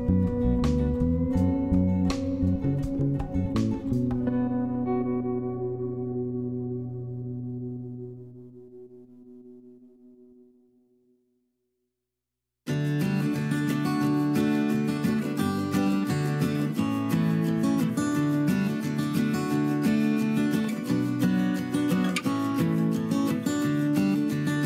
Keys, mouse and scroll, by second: 10.3 s, 12.4 m.